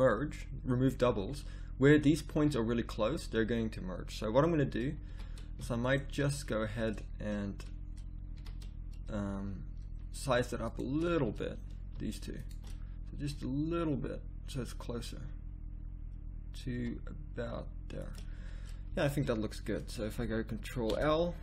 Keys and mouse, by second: 4.8 middle click, 5.0 a, 8.4 a, 10.0 middle click, 11.9 right click, 13.1 s, 18.3 middle click, 18.9 a, 20.9 ctrl+l.